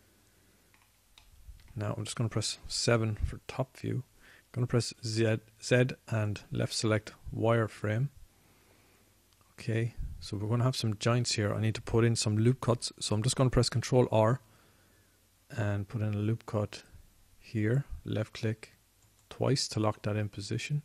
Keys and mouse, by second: 1.6-4.2 middle drag, 4.2 KP_7, 6.4 z, 18.0 ctrl+r, 20.5-20.8 drag.